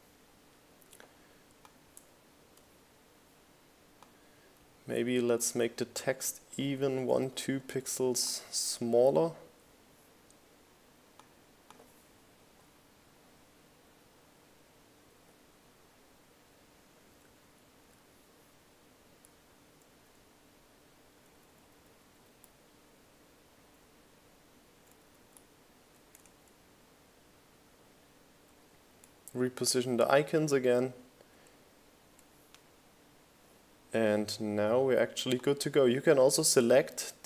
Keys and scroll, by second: 2.2 Down, 5.8 Up, 12.8 Up, 14.4 Up, 16.9 Up, 18.3 Up, 19.5 Down, 20.6 Up, 22.1 Up.